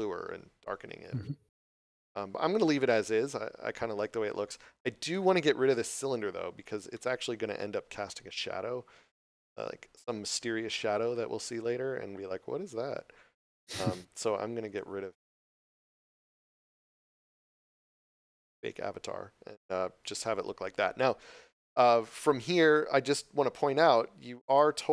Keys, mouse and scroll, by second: 1.8 Return, 7.0 middle click, 13.5 click, 14.7 right click, 24.5 click.